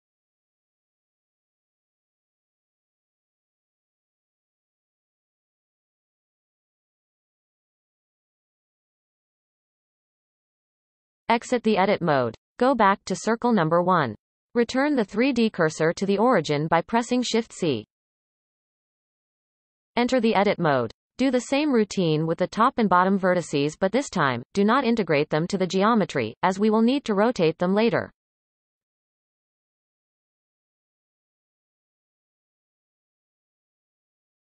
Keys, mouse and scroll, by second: 0.5-0.8 shift+middle drag, 0.8-1.1 scroll up 1, 1.7 click, 2.1-3.0 shift+drag, 3.4-4.0 shift+drag, 4.0 x, 5.4 click, 5.8 shift+click, 6.6 f, 7.1 click, 7.5 shift+click, 8.3 f, 10.2-11.0 scroll down 4, 11.0 Tab, 11.5-12.0 shift+middle drag, 12.0-12.8 scroll down 3, 12.8-14.0 shift+middle drag, 14.0 click, 15.1 shift+c, 15.7-16.6 scroll up 3, 16.6 scroll up 5, 17.2-19.7 shift+middle drag, 19.7 Tab, 20.5-20.9 shift+middle drag, 20.9 scroll up 1, 22.0 click, 23.1 shift+d, 25.7 e, 27.0-27.5 scroll down 1, 27.5-28.9 shift+middle drag, 28.9-29.7 drag, 29.7 shift+d, 31.5 e, 34.2-34.5 scroll down 1.